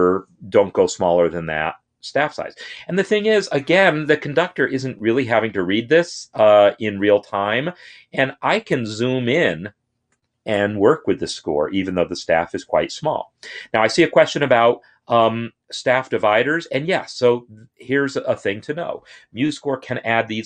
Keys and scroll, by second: 14.4 Tab.